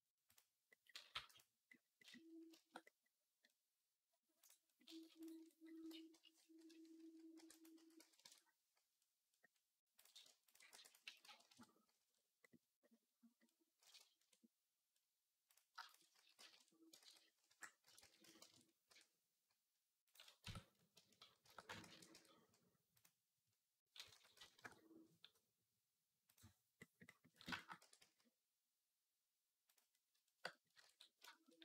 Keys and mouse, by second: 0.1-1.2 drag, 0.9 g, 1.2-4.2 middle drag, 4.2 click, 4.3-10.8 middle drag, 7.2 e, 7.5 s, 9.7 click, 10.2 ctrl+click, 10.5 e, 10.8 s, 15.5 shift+a, 15.7 shift+click, 15.9 s, 16.8 ctrl+z, 17.3 ., 17.8 s, 18.7 q, 19.8-29.6 drag, 20.2 Tab, 21.2 shift+d, 21.6 ctrl+a, 21.9 Tab, 23.9 s, 27.6 e, 29.6-31.6 middle drag, 30.9 ctrl+s.